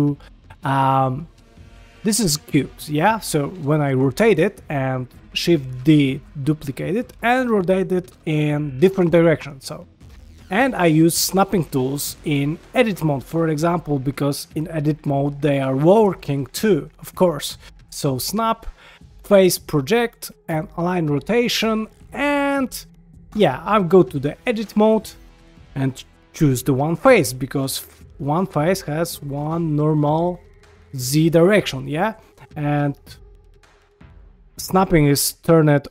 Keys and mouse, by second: 0.4 shift+middle click, 0.7 g, 3.2 r, 5.8 shift+d, 7.0 r, 8.1 g, 9.9 shift+middle drag, 10.5 shift+middle click, 13.0 click, 17.5 click, 18.2-21.0 drag, 21.6 shift+middle drag, 22.6 click, 23.3 Tab, 24.7 click, 26.6 middle click, 27.2 shift+middle drag, 30.7 middle click, 31.5-32.1 middle drag, 32.9-35.9 drag.